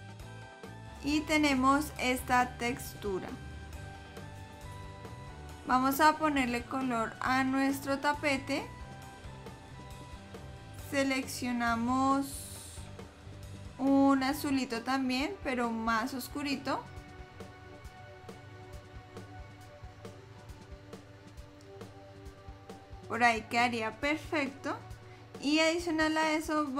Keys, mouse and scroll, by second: 7.3 click, 8.5 click, 12.0 click.